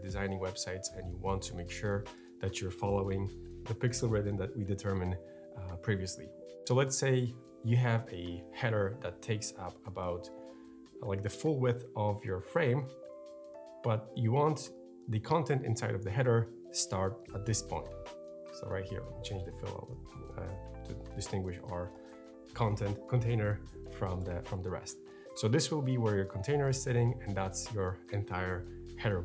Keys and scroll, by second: 16.5 r.